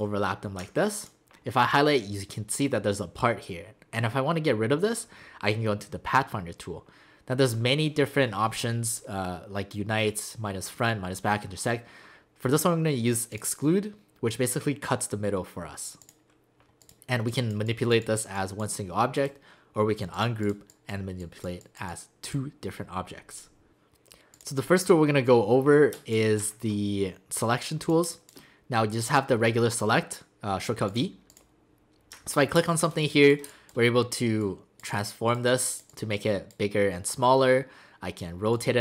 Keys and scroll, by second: 25.9 space, 28.0 space, 32.6 space, 33.5 space.